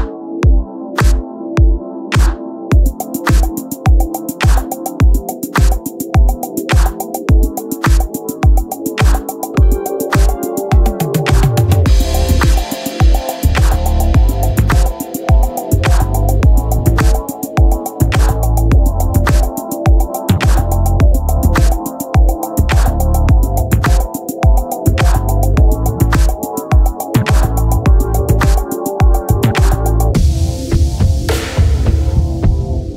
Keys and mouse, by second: 0.5 click, 7.7 click, 16.1 click, 22.7 click, 24.0 click, 27.8 click.